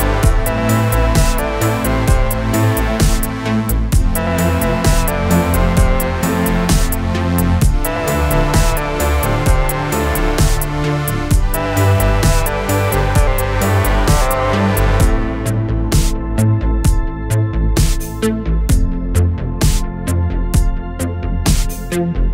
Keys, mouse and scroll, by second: 3.7 ctrl+d, 4.6 click, 7.3 click, 9.1-10.2 alt+click, 18.1 click, 19.7 click, 21.5-22.3 alt+click.